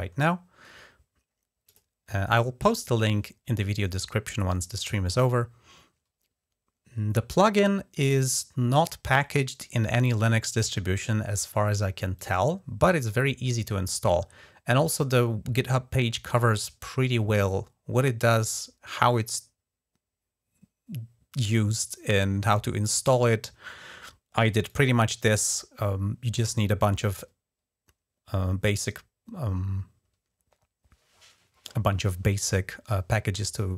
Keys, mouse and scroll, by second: 1.4 click, 11.9-22.7 drag, 24.4-25.2 drag.